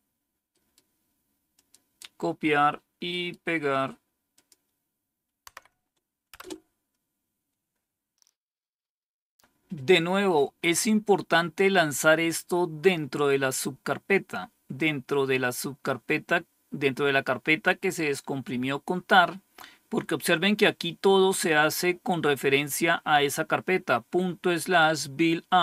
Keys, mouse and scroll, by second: 0.4 right click, 1.4 click, 2.9 right click, 4.2 click, 5.4 Tab, 6.2 Return.